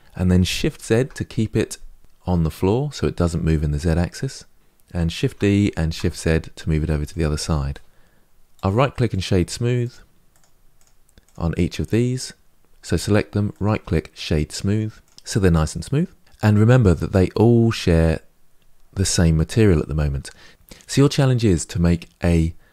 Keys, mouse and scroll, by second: 5.0 shift+d, 8.2 middle click, 8.9-9.6 right drag, 9.6 click, 10.6-11.0 right drag, 11.0 click, 14.8-22.7 right drag.